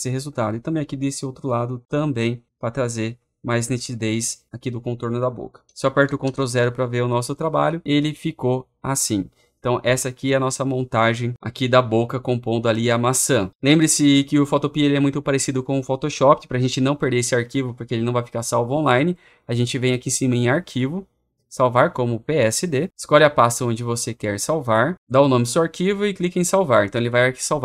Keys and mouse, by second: 2.4 click, 2.6 click, 3.1 click, 3.7 click, 5.9 click, 6.1 ctrl+0, 8.7 click, 22.8 click, 24.0 click, 26.1-27.6 drag.